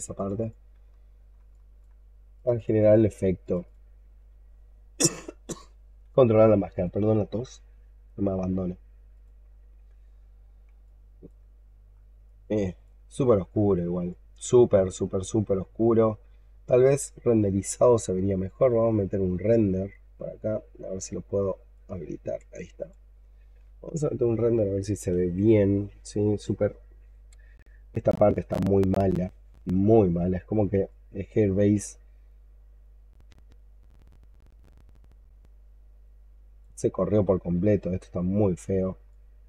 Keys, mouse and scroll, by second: 0.0 double click, 0.3 double click, 0.9 alt+middle click, 1.4 alt+click, 2.4 double click, 2.7 double click, 3.5 double click, 3.9-6.6 scroll down 11, 10.1-10.6 scroll down 12, 10.7 alt+click, 11.4-12.0 scroll up 10, 12.1 alt+click, 13.4 alt+middle click, 14.0 alt+click, 14.8-16.0 alt+drag, 17.0-19.4 alt+scroll down 5, 29.7-30.4 scroll up 4, 30.7 alt+click, 33.2-34.7 scroll up 5, 35.3 alt+click, 37.7-39.0 scroll down 13, 39.0 alt+click.